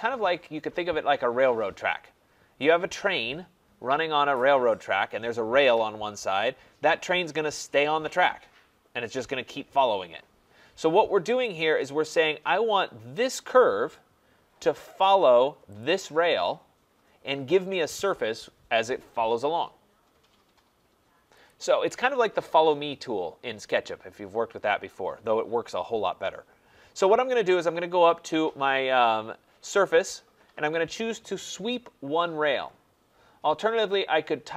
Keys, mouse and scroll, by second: 11.4 click, 13.3 click, 15.8 click, 21.5 click, 30.1-34.5 drag.